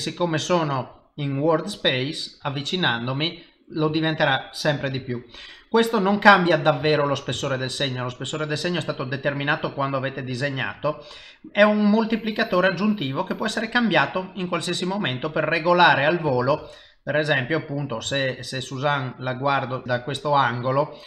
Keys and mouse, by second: 2.1 ctrl+middle click, 2.5 middle click, 4.1 shift+middle click, 5.1 ctrl+middle click, 5.1 ctrl+c, 6.0 ctrl+middle click, 6.3 middle click, 7.0 ctrl+middle click, 7.4 shift+middle click, 7.5 shift+middle click, 7.9 middle click, 9.9 middle click, 11.6 click, 16.1 click, 16.9 middle click, 18.2 ctrl+middle click, 18.7 middle click, 20.3 middle click.